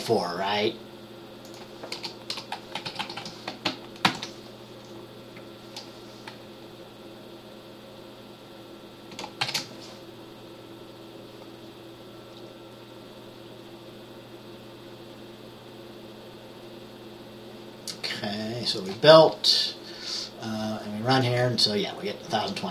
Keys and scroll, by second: 2.4-3.8 typing, 4.2 ctrl+s, 9.5 ctrl+b.